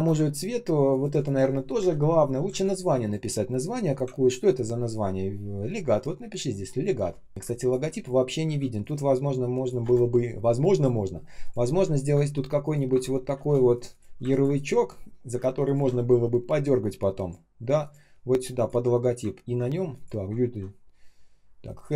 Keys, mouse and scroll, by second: 0.2-0.8 ctrl+scroll up 1, 0.8 ctrl+click, 1.1 ctrl+shift+click, 1.7 Delete, 2.4 k, 4.1 ctrl+scroll down 1, 4.8 ctrl+scroll up 1, 5.8 ctrl+scroll down 1, 6.9 ctrl+я, 7.3 shift+0, 7.3 space, 8.3 k, 9.7 Return, 11.6 shift+Down, 12.6 shift+Down, 14.2 ctrl+click, 15.5 ctrl+shift+click, 21.6 ctrl+shift+ъ.